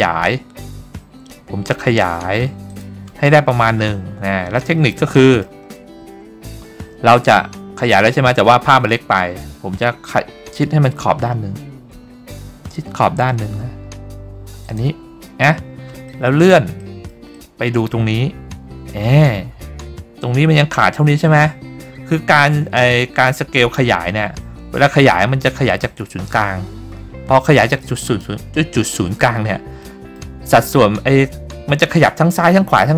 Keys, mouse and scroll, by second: 2.8 click, 3.8-4.3 scroll up 3, 4.7 middle click, 5.3 middle click, 7.2 g, 14.8 click, 16.2 middle click, 16.9 middle click, 17.5 middle click, 18.4 scroll up 2, 19.0-19.3 scroll down 2, 25.0 s, 28.3 right click, 30.0 middle click.